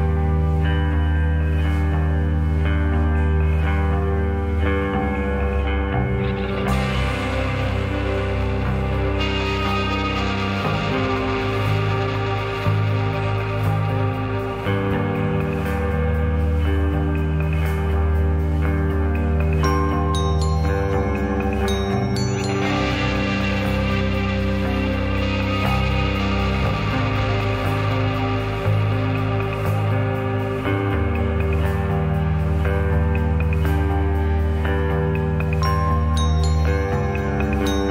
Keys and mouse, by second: 2.5-3.2 drag, 4.8 click, 5.1 click, 6.2 click, 6.8-8.1 drag, 9.9 click, 10.6-11.9 drag, 14.1-15.8 middle drag, 16.4 Tab, 17.4 click, 17.6-18.6 drag, 19.2 click, 19.7 shift+click, 20.3 shift+click, 20.9 shift+click, 21.4 shift+click, 23.3-23.8 drag, 25.3 click, 27.8 click, 28.8 middle click, 29.9 /, 33.8 shift+click, 37.8 shift+click.